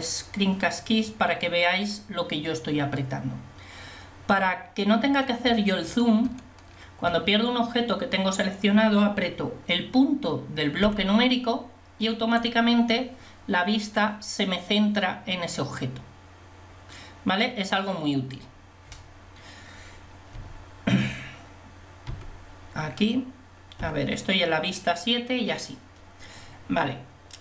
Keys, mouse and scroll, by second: 11.0 KP_Decimal, 20.4 KP_5, 22.2 KP_1, 24.0 KP_7.